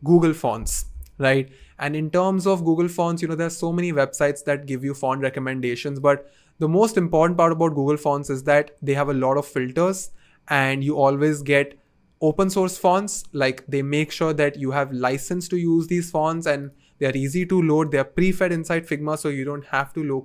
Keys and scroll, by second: 0.1 Return, 0.1 typing, 1.9 typing.